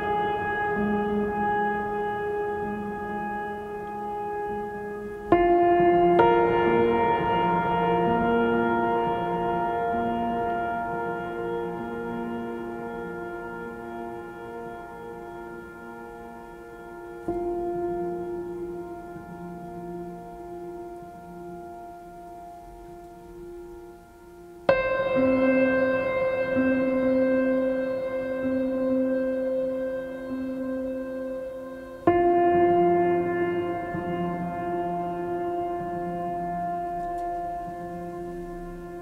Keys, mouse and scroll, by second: 19.3 right click, 20.0 right click, 25.2 right click, 26.5 right click, 30.6 right click, 38.0 right click.